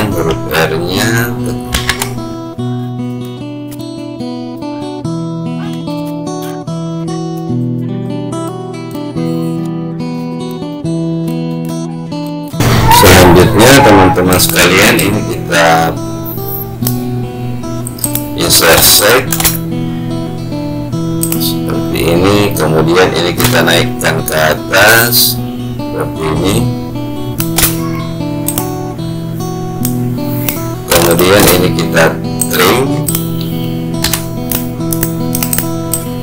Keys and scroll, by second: 2.7 ctrl+v.